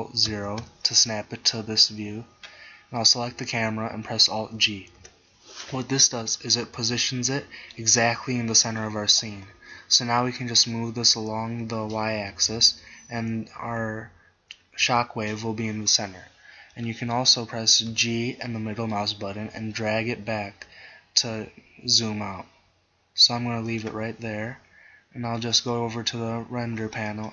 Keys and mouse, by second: 0.4 ctrl+alt+KP_0, 5.1 alt+g, 14.9 KP_0, 18.0 g, 23.9-25.7 drag.